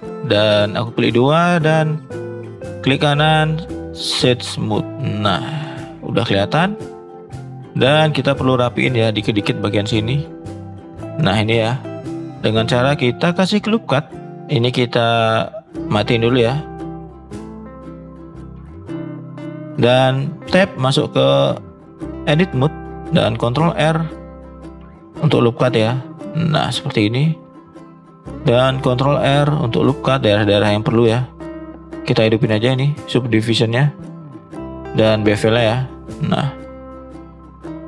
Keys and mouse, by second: 0.6 click, 1.7 click, 2.1 click, 2.7-4.3 right drag, 4.8-5.1 middle drag, 5.4 click, 5.7 shift+middle drag, 6.0-7.0 middle drag, 7.4 shift+middle drag, 8.3 shift+middle drag, 9.8 middle drag, 10.4 middle click, 12.6 middle click, 13.4 shift+middle drag, 14.0 click, 15.9 click, 16.4 click, 16.9 click, 17.3 shift+middle drag, 17.9 shift+middle drag, 18.4 middle drag, 19.0 middle click, 19.6 Tab, 20.4 Tab, 21.4-21.7 shift+middle drag, 22.4 shift+middle click, 23.7 ctrl+r, 27.4 shift+middle click, 27.8 middle click, 28.6 ctrl+r, 32.8 click, 33.5-34.5 middle drag, 35.5 click, 36.0 middle click, 37.2 shift+middle click.